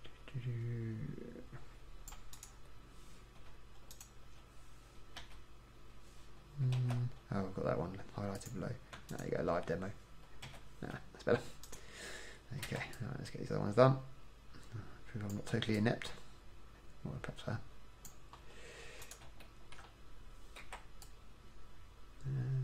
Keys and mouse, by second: 4.0-5.4 drag, 5.4 f, 6.9 ctrl+z, 10.6 f, 12.8 c, 19.6 middle click, 20.8 c, 21.3 click.